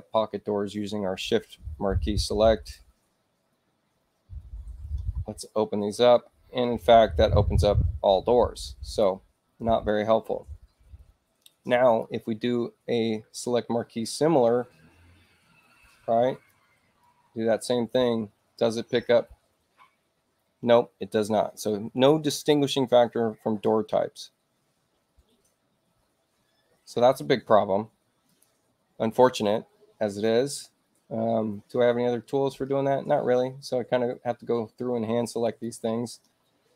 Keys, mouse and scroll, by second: 1.5 shift+click, 8.9 click, 9.3-9.7 scroll up 1, 11.9 click, 16.3 click, 17.0 click, 28.2 click, 35.4 ctrl+click.